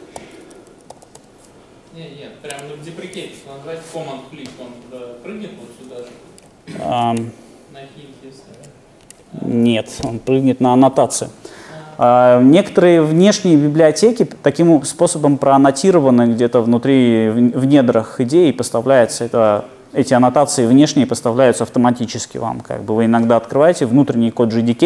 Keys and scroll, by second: 0.2 shift+super+o, 6.6 alt+super+[.